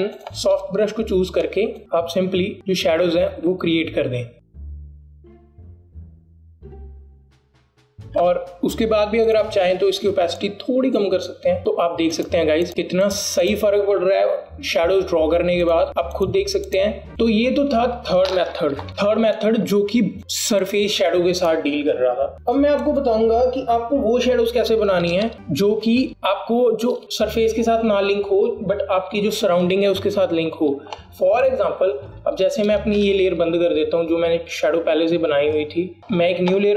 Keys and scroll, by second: 7.8 ctrl+KP_0, 18.9 KP_Add, 25.3 BackSpace, 27.0 ctrl+z, 34.1 BackSpace.